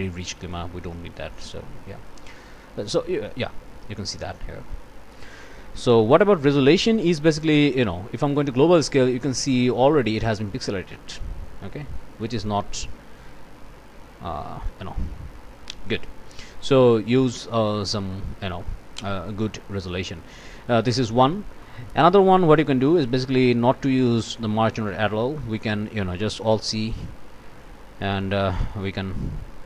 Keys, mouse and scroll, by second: 0.4 click, 1.4 click, 6.9-9.6 drag, 9.9 scroll up 1, 11.3 scroll down 1, 12.9 click, 14.1 1, 14.5 Return, 15.3 click, 16.2 scroll down 1, 16.9 click, 18.1 click, 19.0 click, 20.1-21.2 drag, 21.6 click, 23.3 click, 24.2 Delete, 25.6 click, 26.5 alt+c, 27.6 ctrl+click, 28.8 click.